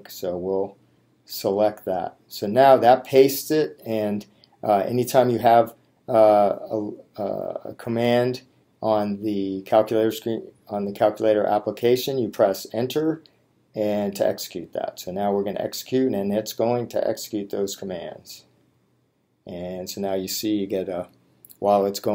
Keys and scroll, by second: 1.4 Return.